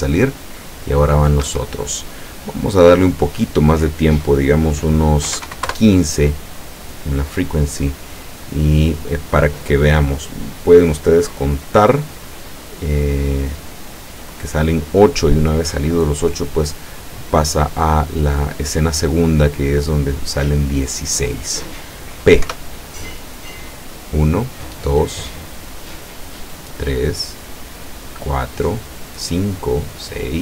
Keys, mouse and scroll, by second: 1.5 Escape, 3.0 click, 5.3 KP_1, 5.5 KP_5, 5.8 KP_Enter, 22.5 p.